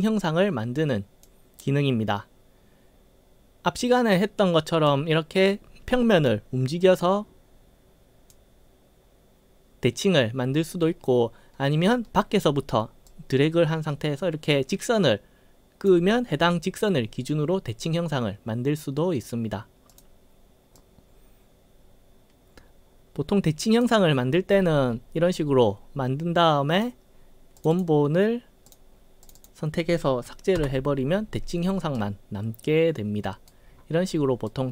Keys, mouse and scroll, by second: 0.8 click, 4.0-4.9 drag, 5.5-6.3 right drag, 6.8-8.4 drag, 13.1-15.9 drag, 20.0 click, 20.9-23.9 drag, 24.3-25.1 scroll up 3, 26.8 click, 27.7 click, 27.8 click, 28.8 click, 29.3 click, 29.5 click, 32.1-33.6 right drag, 33.8 scroll down 2, 33.8 scroll up 4, 34.6-34.7 right drag.